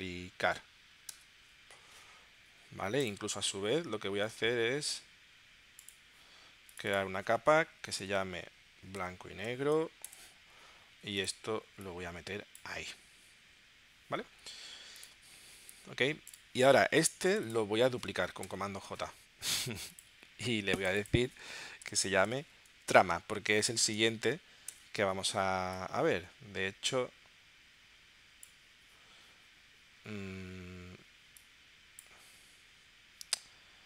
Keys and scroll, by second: 1.1 Return, 8.0 shift+b, 9.0 shift+6, 9.4 shift+n, 10.2 Return, 18.4 super+j, 21.8-24.2 typing, 24.9 Return.